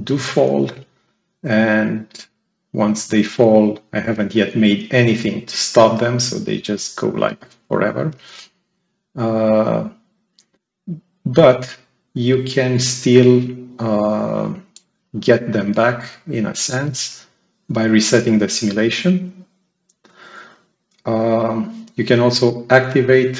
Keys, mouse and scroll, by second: 0.5-4.0 right drag, 0.5-1.8 drag, 2.7-3.9 drag, 13.2 click, 18.7 click, 22.0 click.